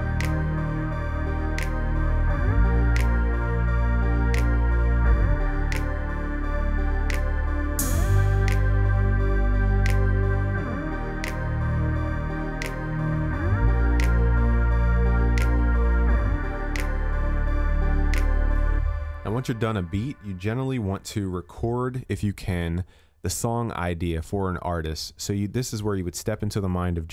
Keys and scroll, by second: 20.6 ctrl+s.